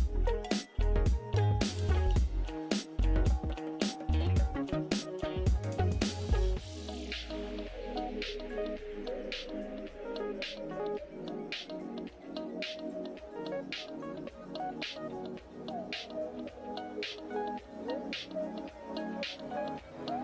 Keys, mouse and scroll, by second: 4.8 click, 5.0 ctrl+z, 7.1 click, 8.8 click, 13.8 click, 17.4 click, 17.5 ctrl+z, 18.0 ctrl+i, 18.7 ctrl+u, 19.7 ctrl+z, 20.0 ctrl+z.